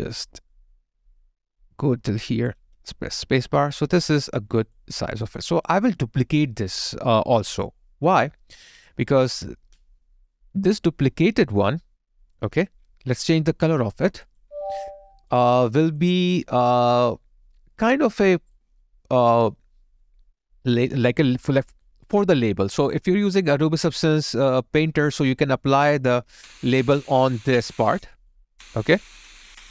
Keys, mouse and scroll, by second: 3.4 alt+click, 5.8 alt+middle click, 13.3 alt+click, 14.3 alt+double click, 22.8 alt+click, 23.4 alt+right click, 23.8 alt+middle click, 24.2 alt+right click, 25.0 alt+click.